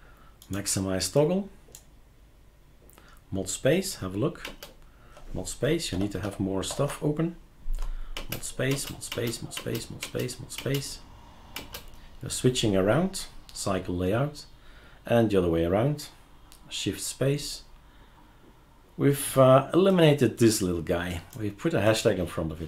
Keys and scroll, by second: 4.4 super+space, 5.9 ctrl+alt+t, 6.2 ctrl+alt+t, 6.7 ctrl+alt+t, 8.2 super+space, 8.7 super+space, 9.1 super+space, 9.6 super+space, 10.1 super+space, 10.6 super+space, 11.6 super+space.